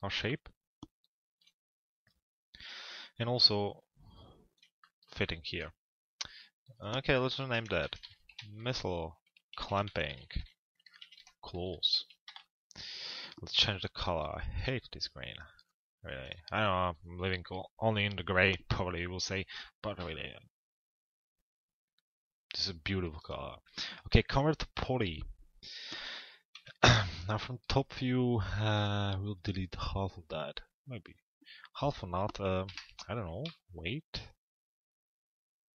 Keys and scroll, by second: 12.1 Return, 26.1 t, 26.8 z, 32.2 Delete.